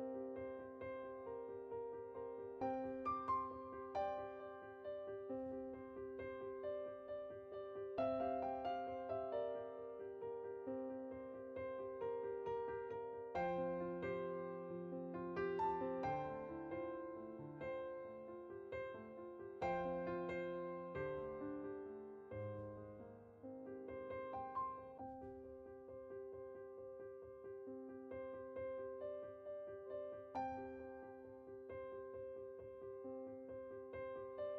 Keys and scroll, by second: 9.4 Tab, 11.4 Tab, 25.3 Tab.